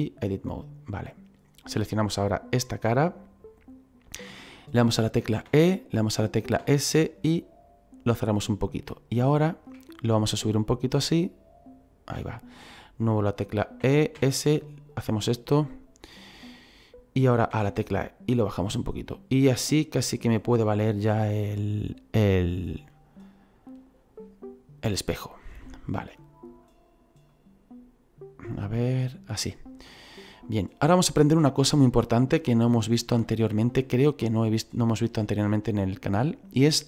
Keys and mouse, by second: 0.3 click, 2.0 right click, 5.5 e, 6.6 s, 8.6 click, 9.2 shift+middle click, 10.5 click, 13.8 e, 14.2 s, 15.1 click, 17.5 e, 20.3 click, 25.7 middle click, 27.3 click, 29.9 middle click.